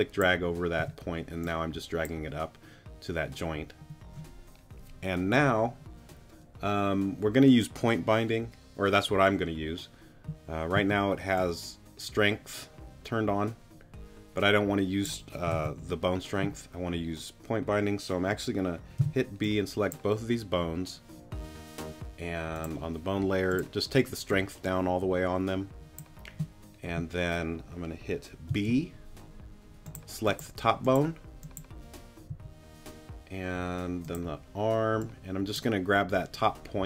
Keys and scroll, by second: 0.8 t, 10.7 z, 15.5 super+z, 19.0 b, 28.5 b, 32.3 g.